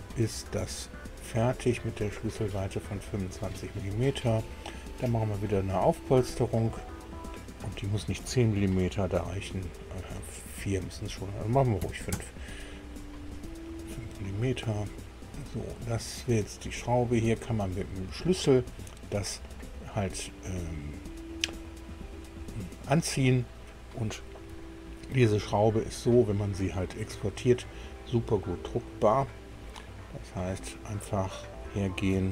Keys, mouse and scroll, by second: 1.7 click, 5.4 click, 9.2 KP_3, 10.8 BackSpace, 11.8 KP_5, 12.1 KP_Enter, 14.3 click, 14.7-17.2 middle drag, 18.0 middle click, 19.0-19.3 scroll down 1, 19.9-21.5 middle drag, 22.9 middle click, 25.0 shift+click, 25.5 click, 26.5 middle click, 31.1 click.